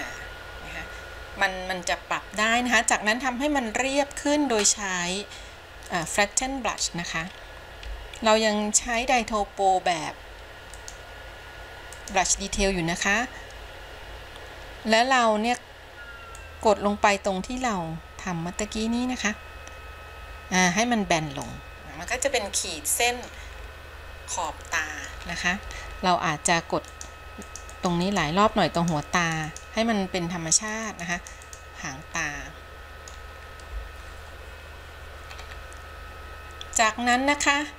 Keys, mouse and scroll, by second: 6.0 click, 8.0 f, 10.9-12.2 drag, 16.6-21.7 drag, 22.2 scroll down 1, 22.4-23.6 middle drag, 23.8 scroll down 3, 24.6 middle click, 25.4-26.3 scroll up 5, 27.0 click, 27.7 click, 28.0 click, 28.3 click, 29.0 click, 29.4 click, 29.7 click, 30.7 click, 31.1 click, 31.4 click, 31.7 click, 32.4 middle click, 33.7-34.4 scroll down 3, 35.4-36.0 scroll up 3.